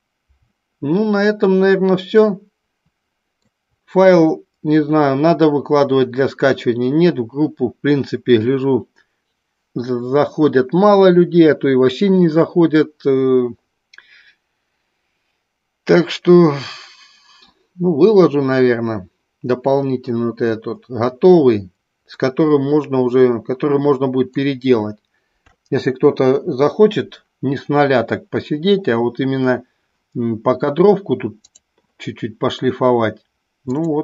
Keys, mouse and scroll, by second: 2.4-4.2 middle drag, 22.7-24.8 middle drag, 31.7 click.